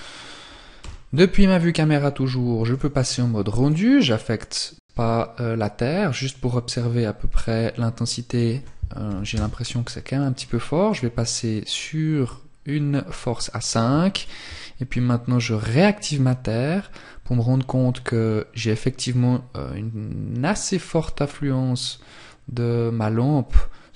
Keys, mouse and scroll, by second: 0.0 KP_0, 1.8 click, 4.9-6.5 scroll up 1, 7.4 click, 13.2 shift+click.